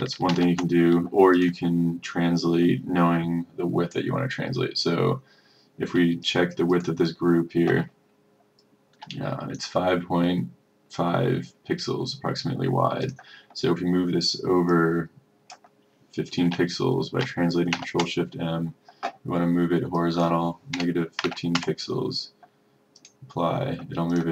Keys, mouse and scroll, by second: 0.4 ctrl+z, 1.4-16.3 drag, 17.8 ctrl+shift+m, 20.0 click, 21.3 KP_1, 23.1-24.3 drag.